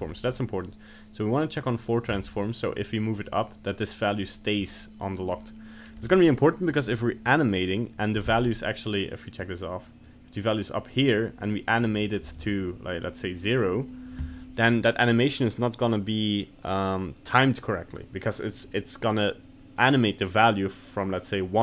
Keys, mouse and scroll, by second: 0.1 middle click, 0.3 middle click, 2.2 g, 5.4 middle click, 5.8-7.4 scroll down 1, 9.2 click, 10.0 click, 12.9 g.